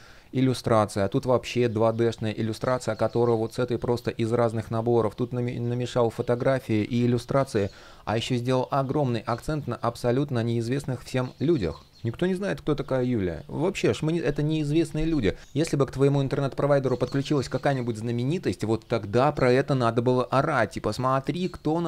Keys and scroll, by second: 6.2 super+z.